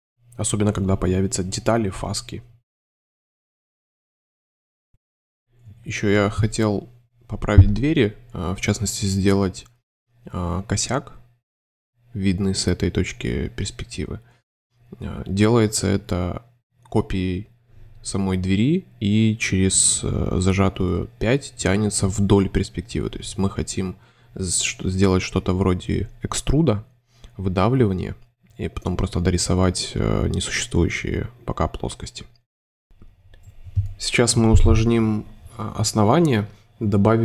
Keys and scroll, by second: 0.8 space, 1.9 space, 4.8 shift+super+s, 5.3 c, 5.8 shift+space, 6.5 shift+v, 6.9 shift+super+c, 7.3 super+e, 7.8 5, 9.1 space, 9.6 alt+shift+Tab, 9.8 shift+space, 10.4 c, 14.5 shift+v, 16.6 super+c, 20.1 super+3, 20.2 super+c, 21.0 alt+super+Delete, 21.1 alt+super+3, 21.7 super+s, 22.5 space, 24.3 m, 25.3 1, 27.0 space, 29.4 super+v, 29.7 space, 33.6 space.